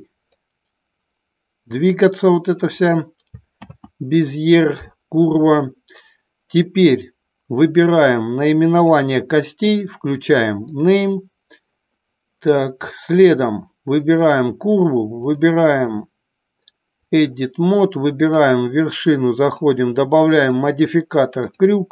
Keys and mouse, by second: 0.3-2.5 drag, 3.8 ctrl+z, 10.7 click, 14.2 click, 15.2 click, 15.6-17.2 drag, 19.4 click, 20.6 click.